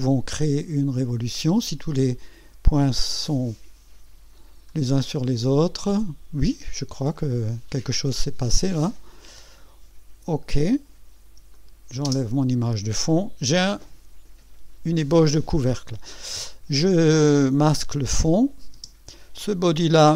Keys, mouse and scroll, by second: 3.0 click, 4.7-5.8 scroll down 4, 6.4 right click, 7.2-7.8 scroll up 4, 8.2 right click, 9.4 click, 11.5 click, 12.0 space, 18.2 click, 18.7 space, 19.4 click.